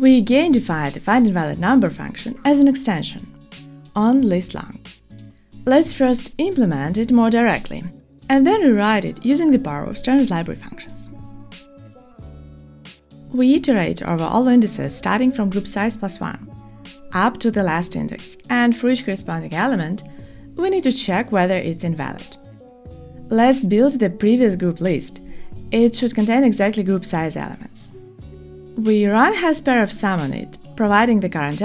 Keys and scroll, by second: 15.3 Return.